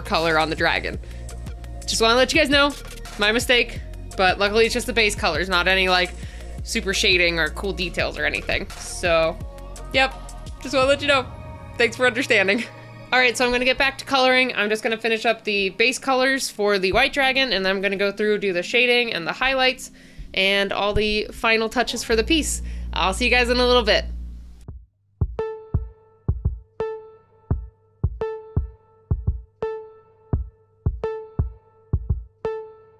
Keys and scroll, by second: 24.8 space, 25.4 space.